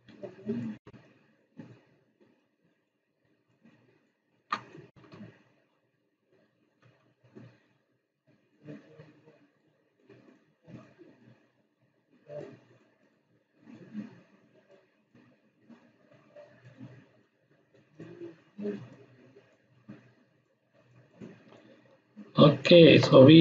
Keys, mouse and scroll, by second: 0.1 space, 0.2-0.8 click, 0.6 space, 1.0-1.6 drag, 4.8 Left, 8.1-8.8 drag, 12.7-13.3 click, 13.0-15.3 drag, 21.4 space, 21.5-22.8 ctrl+drag.